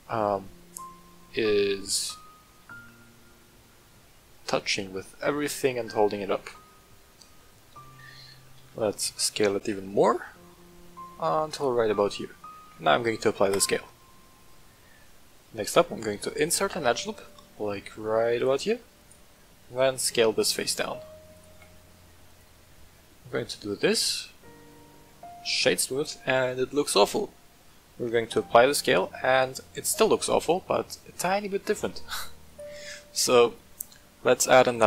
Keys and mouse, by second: 1.9-2.3 middle drag, 2.6-6.7 middle drag, 7.3-8.1 shift+middle drag, 8.5 s, 9.6 z, 11.5 click, 11.9 middle click, 12.5 ctrl+a, 14.5-14.8 middle drag, 15.5 Tab, 16.5 ctrl+r, 18.3 click, 18.9 alt+click, 19.5 s, 20.3 click, 20.4 g, 20.7 z, 21.3 click, 21.4 s, 22.2 click, 22.4 Tab, 22.7-24.5 middle drag, 25.4 w, 28.6 ctrl+a, 29.8-30.3 middle drag, 32.4-34.8 drag.